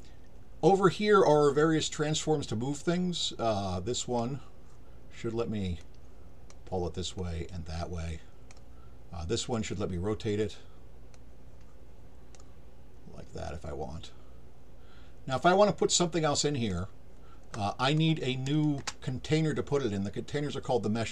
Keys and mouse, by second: 4.0 click, 5.8 click, 7.2-8.5 drag, 9.4 click, 11.1-12.3 drag, 13.5-16.7 drag, 17.8 click.